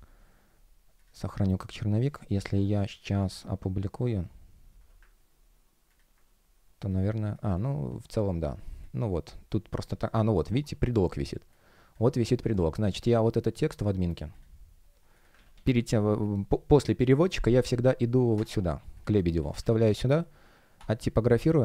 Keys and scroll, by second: 15.2 super+a, 15.4 super+c, 19.4 super+ф, 19.7 super+m.